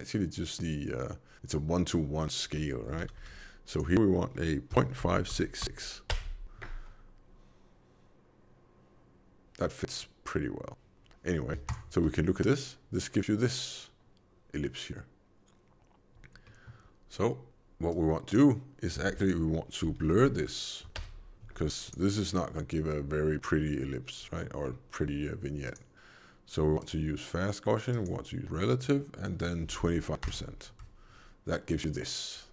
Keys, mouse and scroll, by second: 2.4 v, 3.0 alt+v, 3.6 click, 5.5 6, 11.6 ctrl+shift+click, 16.3 middle click, 17.8 click, 18.9 shift+a, 24.1 middle click, 24.5-25.5 scroll up 2, 25.5 click, 27.8 click, 28.7 click.